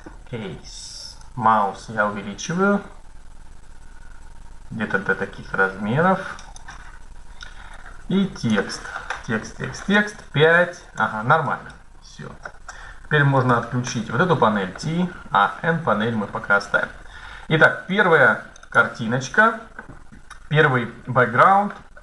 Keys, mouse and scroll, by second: 1.8 click, 7.5-9.3 drag, 9.7 KP_5, 10.6 middle click, 10.6 KP_5, 13.6 t, 16.0 middle click, 17.7-20.2 drag, 20.9 middle click.